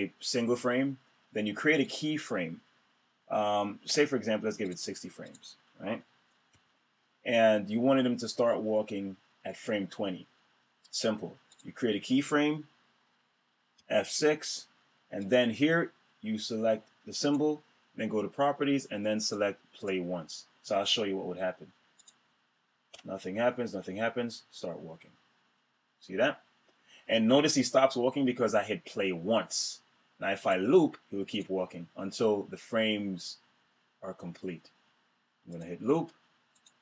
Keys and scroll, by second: 6.1 F5, 13.3 F6, 22.5 Return.